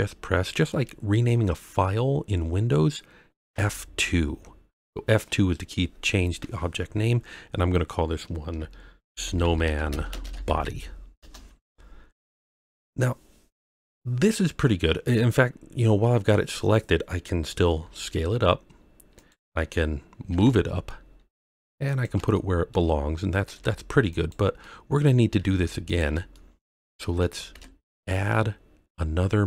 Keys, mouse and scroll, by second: 3.5 F2, 12.1-12.9 scroll down 3, 13.0-14.0 scroll up 1, 15.7 scroll down 1, 16.2-16.5 scroll up 1, 17.8 s, 19.1 click, 19.9-20.2 scroll down 1, 20.2 g, 20.3 z, 21.8 click, 22.3-22.7 shift+middle drag, 23.5 g, 24.1 click, 24.6-25.0 middle drag, 25.3 g, 25.8 click, 26.3-26.6 shift+middle drag, 26.9 middle drag, 27.5 shift+a.